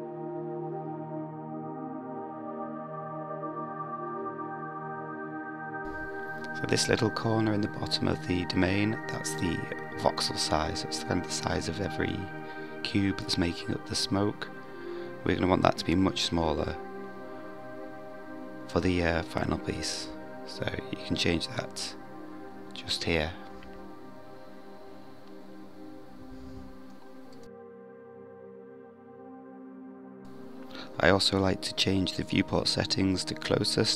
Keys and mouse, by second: 0.4 click, 14.3-21.7 drag, 29.7 drag, 31.4-33.2 drag.